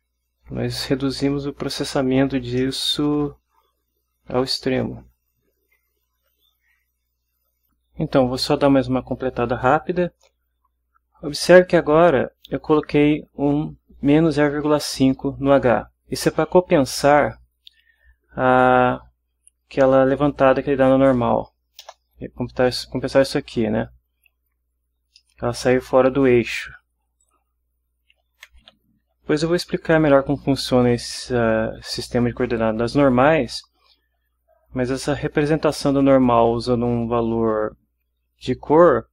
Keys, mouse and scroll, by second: 2.7-6.6 middle drag, 20.4 click, 21.9 BackSpace, 25.1-26.5 middle drag, 27.2 click, 28.1-29.5 typing.